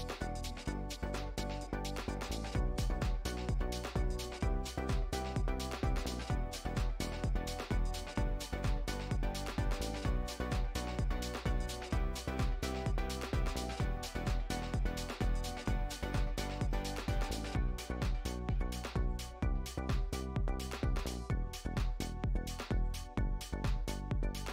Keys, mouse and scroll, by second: 2.6-4.3 shift+drag, 5.1-8.2 shift+drag, 8.2 Tab, 8.8 click, 9.9 click, 10.6 Tab, 10.8 middle click, 11.4 scroll down 3, 11.6 middle click, 11.9 Tab, 13.1 click, 16.0 middle drag, 16.2 scroll down 1, 16.3 scroll up 1, 16.6-17.0 shift+middle drag, 17.0 s, 17.8-18.8 middle drag, 18.8 click, 20.0-22.1 middle drag, 22.1 click, 22.8 middle click, 23.2 x, 23.5-24.0 middle drag, 24.0 scroll down 3, 24.2-24.5 middle drag.